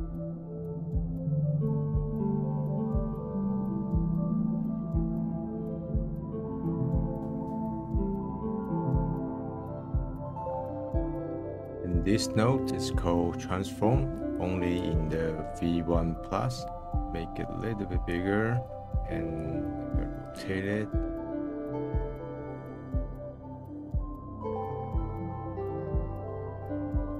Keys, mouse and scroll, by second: 0.4 middle click, 0.6 click, 0.8 middle click, 0.9 click, 1.0 middle click, 1.2 click, 1.3 middle click, 1.4-1.7 drag, 1.7 middle click, 2.0 click, 2.0 middle click, 2.1 click, 2.4 middle click, 2.5 click, 2.7 middle click, 2.8 click, 2.9 scroll down 1, 3.0 middle click, 3.0 click, 3.3 middle click, 3.4 click, 3.5 middle click, 3.6 click, 3.8 middle click, 3.8 click, 4.1 middle click, 4.2 click, 4.4 middle click, 4.5 click, 4.7 middle click, 5.2 middle click, 6.4 middle click, 7.1 click, 7.4 click, 7.6 middle click, 8.6 click, 8.8 scroll up 1, 8.9 middle click, 9.2 click, 9.4 middle click, 9.5 click, 9.6 middle click, 9.7 click, 9.8 middle click, 9.9 ctrl+z, 10.0 ctrl+z, 10.0 click, 10.2 ctrl+z, 10.2 click, 10.3 middle click, 10.4 click, 10.5 middle click, 10.6 click, 10.8 middle click, 10.9 ctrl+z, 10.9 click, 11.1 ctrl+z, 11.1 ctrl+z, 11.2-13.2 drag, 13.3-14.2 middle drag, 14.4-15.9 drag, 15.9 middle click, 16.4-16.8 scroll up 1, 16.8 click, 18.3-19.3 middle drag, 19.3-20.3 drag, 20.5 middle click, 21.1 click, 21.2 middle click, 21.5 click, 21.8 middle click, 21.9 click, 22.2 middle click, 22.8 middle click, 23.0 middle click, 23.3 click, 23.6 click, 23.7 KP_0, 23.8 BackSpace, 23.9 BackSpace, 24.5 middle click, 25.0 scroll up 1, 25.2 scroll down 1, 25.3 click, 25.6 click, 26.0 scroll up 1, 26.5 middle click, 26.7 scroll down 1, 26.8 middle click, 27.0 click.